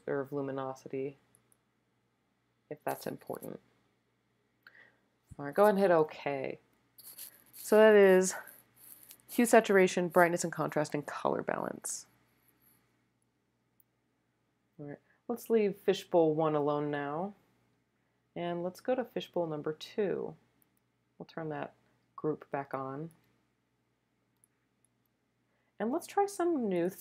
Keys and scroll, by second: 22.6 space, 23.3 space, 24.8 space.